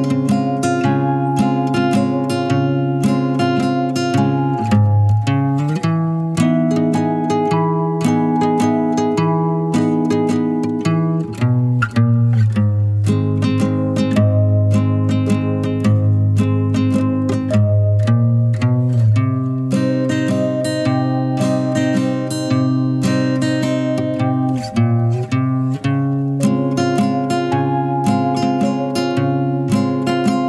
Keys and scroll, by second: 4.1 typing, 19.3 typing, 25.3-26.0 typing, 28.9-30.3 typing.